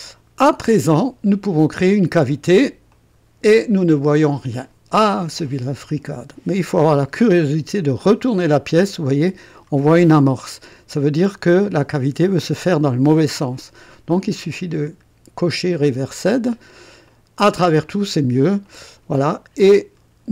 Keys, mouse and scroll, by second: 2.9 click, 7.2-9.8 drag, 10.5-11.9 drag, 15.3 click, 17.0 click, 17.8 click, 18.6 click, 19.3-20.3 drag.